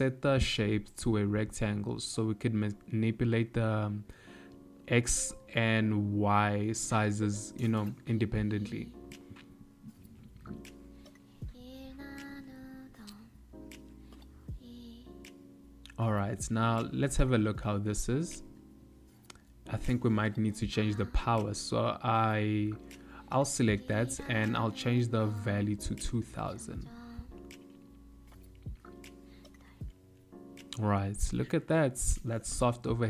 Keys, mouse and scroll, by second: 2.4 click, 6.2 click, 10.0 click, 13.2 middle click, 14.6 ctrl+middle click, 14.6 ctrl+scroll up 1, 15.5 middle click, 18.2 click, 22.0 click, 23.6 click.